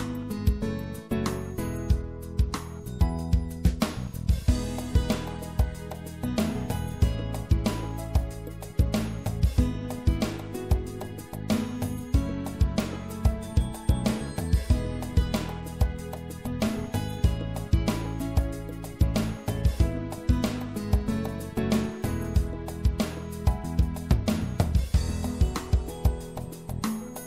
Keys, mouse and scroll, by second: 0.6 middle click, 1.1-5.0 drag, 5.7 e, 9.3-12.6 middle drag, 11.7 i, 16.7-18.5 drag, 18.9-20.8 middle drag, 22.8 middle click, 23.3-24.4 right drag, 24.4-25.9 middle drag.